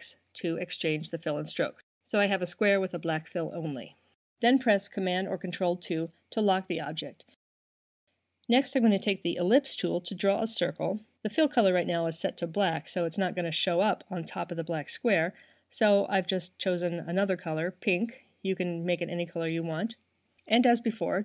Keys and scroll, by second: 0.1 shift+x, 4.1 super+2.